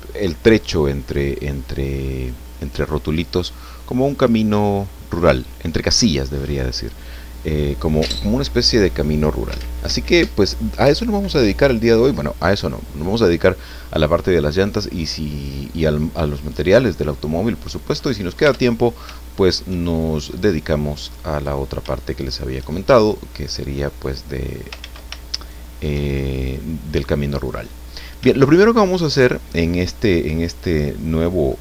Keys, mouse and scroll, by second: 2.3-4.2 middle drag, 5.4-6.8 middle drag, 14.5-16.0 middle drag, 17.6 right click, 18.4 Tab, 19.3 shift+middle click, 19.9 shift+middle click, 21.3 right click, 22.2 shift+right click, 23.3 middle click, 24.8 ctrl+z, 25.4 ctrl+shift+right click, 26.1-27.8 shift+middle drag, 27.9 scroll up 3, 28.8-29.1 shift+scroll down 3, 29.5-31.0 middle drag, 31.5 scroll up 2.